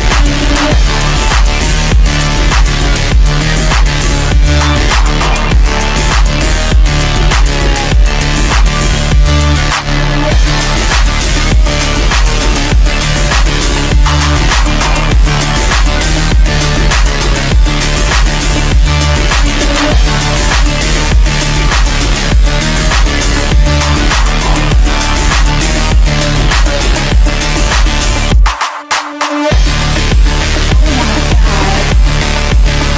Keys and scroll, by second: 28.9 Escape, 30.7 ctrl+g, 31.3-32.2 typing, 32.4 Escape.